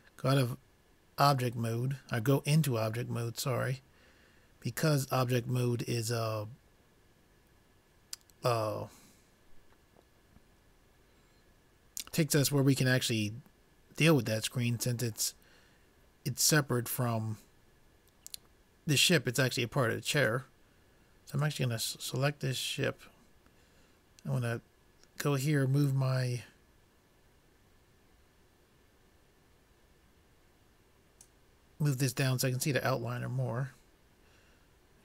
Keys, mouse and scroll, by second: 0.8 click, 20.7 click, 26.1-35.0 drag.